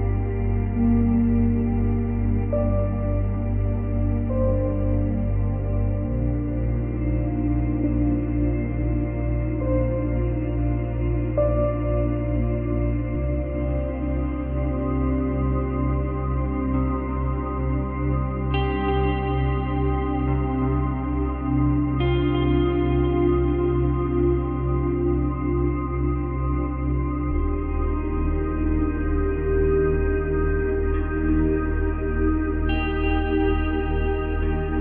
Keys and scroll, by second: 3.0 ctrl+z, 9.8 space, 12.0 space, 15.0 F8, 15.7 F9, 34.4 space.